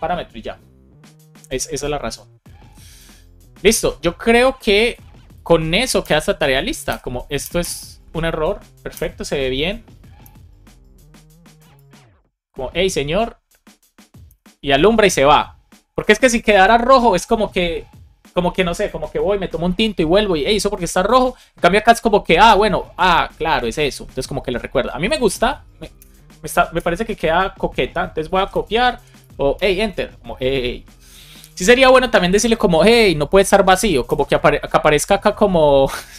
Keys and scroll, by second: 5.9 Return, 6.8 Return, 7.3 Return, 8.9 Return, 10.1 Return, 11.6 Return, 14.2 Return, 22.4 Return, 25.0 Return, 25.9 Escape, 26.7 Return, 28.8 shift+super+Left, 29.1 BackSpace, 29.5 Return, 34.0 Return, 35.2 Escape.